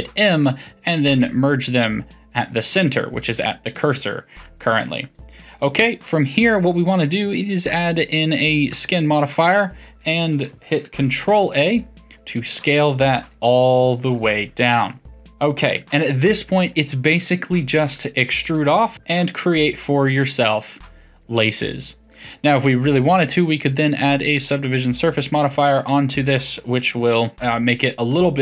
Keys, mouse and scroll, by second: 4.4-6.1 middle drag, 6.1-9.1 drag, 11.4 ctrl+a, 14.9-17.0 middle drag, 17.7-18.2 middle drag, 18.2 e, 20.7-22.8 middle drag, 22.8-25.7 drag, 25.7-27.3 middle drag, 27.3-28.1 scroll up 4, 28.1-28.4 middle drag.